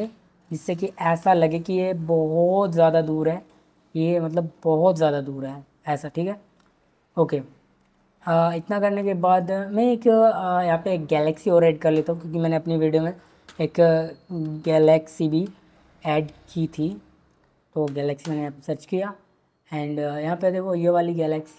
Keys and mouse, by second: 1.2 click, 2.7 click, 3.3 click, 11.2-18.2 drag, 21.2 click.